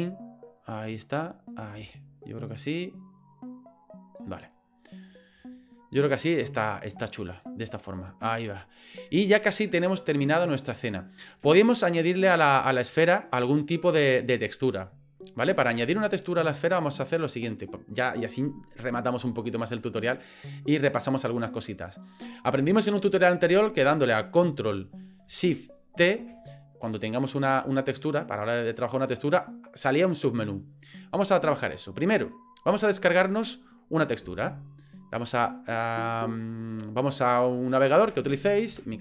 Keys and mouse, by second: 0.0-1.7 drag, 2.5-4.2 drag, 7.4 drag, 11.6-13.4 drag, 17.1-17.7 drag, 21.0-21.8 drag.